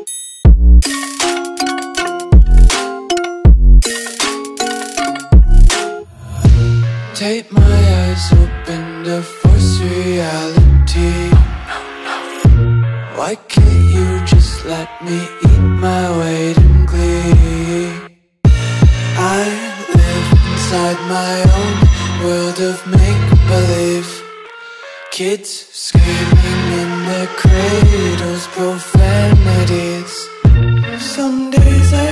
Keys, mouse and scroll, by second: 2.3 click, 10.2 click, 12.4 click, 15.7-20.0 typing, 24.0 shift+Num_Lock, 24.7-25.7 typing, 26.8-31.3 typing.